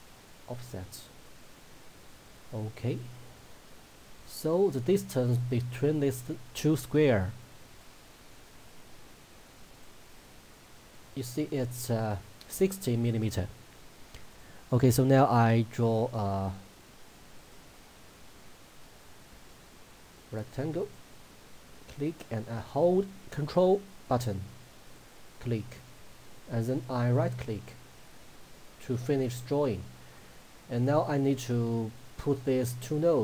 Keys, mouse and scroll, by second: 0.0 click, 4.4 shift+click, 14.3 click, 20.9 click, 24.9 ctrl+click, 32.0 click.